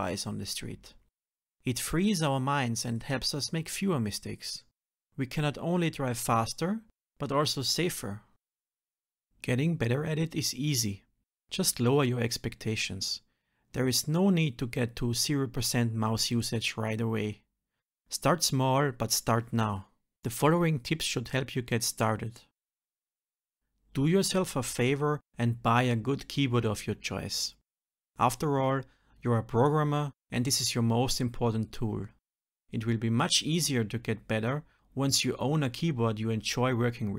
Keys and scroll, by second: 3.0 ctrl+alt+m, 8.7 ctrl+alt+n, 11.8 ctrl+z, 14.7 ctrl+alt+m, 17.8 F6, 19.8 ctrl+alt+n, 22.6 alt+Delete, 23.0 shift+F2, 23.6 alt+Delete, 24.3 shift+F2, 27.3 shift+F10, 35.4 ctrl+alt+m.